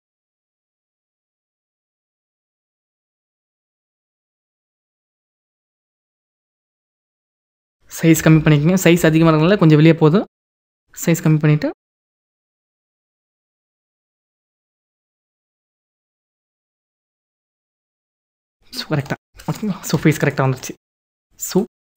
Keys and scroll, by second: 8.0 [.